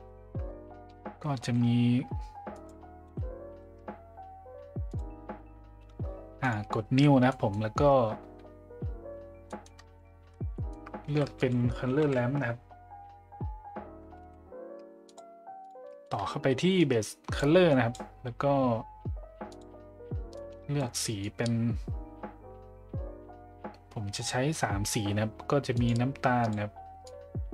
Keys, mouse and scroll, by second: 1.3 shift+a, 2.5 click, 3.1 Delete, 4.9 click, 6.5 drag, 7.4 middle click, 9.6 middle click, 11.0 shift+a, 15.9 middle click, 16.8-17.4 drag, 17.7 click, 25.8 click, 26.4 click.